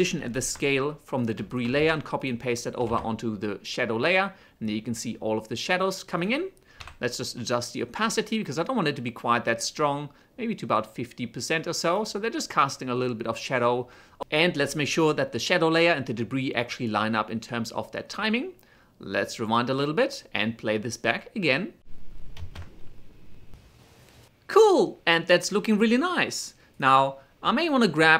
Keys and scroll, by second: 1.5 ctrl+c, 2.6 ctrl+v, 6.6 t, 21.7 shift+space, 24.5 space, 25.4 ctrl+a.